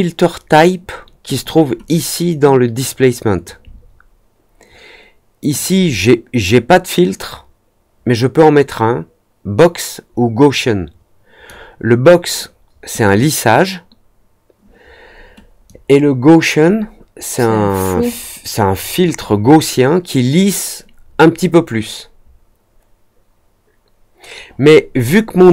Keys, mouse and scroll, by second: 1.8-3.4 drag, 5.5-11.4 drag, 15.6-18.0 drag.